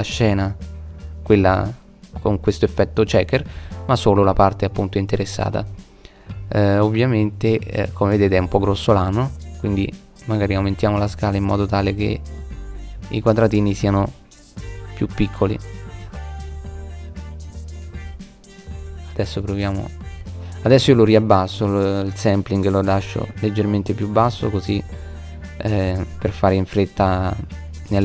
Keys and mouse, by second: 5.5 right click, 6.3-8.8 middle drag, 9.4 click, 10.2 middle click, 26.2 KP_0.